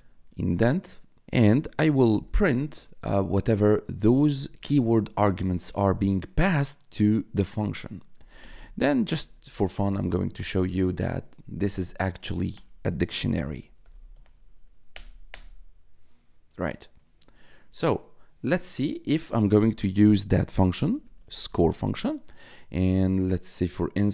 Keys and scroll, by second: 1.2 Tab, 1.4-4.7 typing, 8.1-14.3 typing, 14.9 Return, 20.4-22.0 typing.